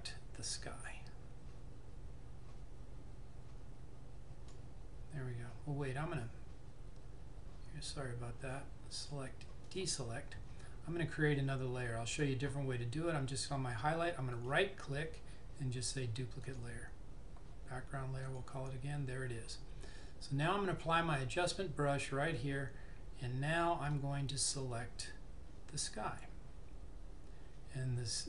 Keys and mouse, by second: 9.0 click, 14.5 right click, 16.6 click, 24.1 click.